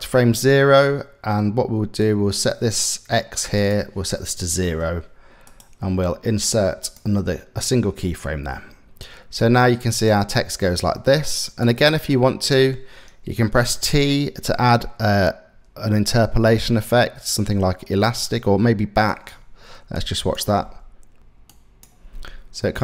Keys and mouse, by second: 1.7 click, 3.2-4.3 drag, 5.2-6.6 drag, 9.0-11.2 drag, 11.8 click, 13.3 t, 19.5 click, 20.2 space, 21.2 click, 21.2 KP_Decimal, 21.7 space.